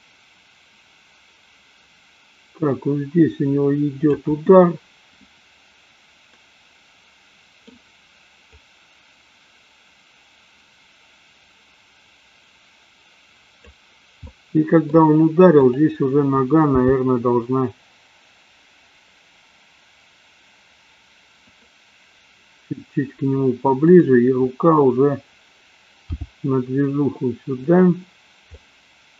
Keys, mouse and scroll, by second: 6.3-7.8 middle drag, 8.8-13.9 drag, 14.3-14.9 middle drag, 16.8 g, 26.2 g, 27.9 drag, 28.5-29.1 middle drag.